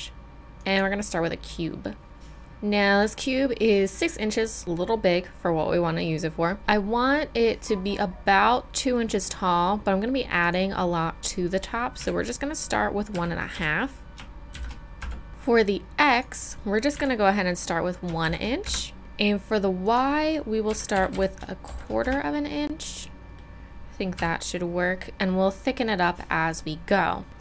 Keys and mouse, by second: 2.5-5.5 middle drag, 10.4-25.7 middle drag, 24.2 KP_Decimal.